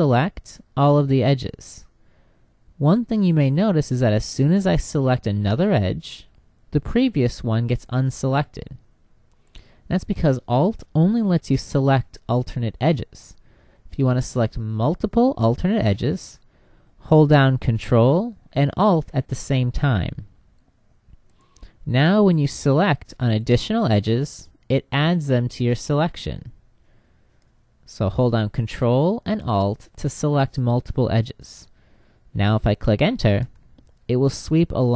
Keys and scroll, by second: 32.8 Return.